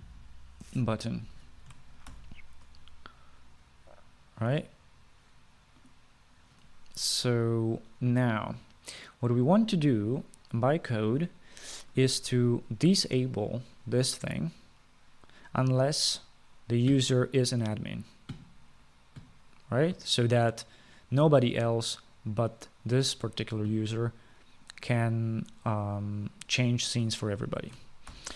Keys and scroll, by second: 0.0-1.5 typing, 3.3 ctrl+s.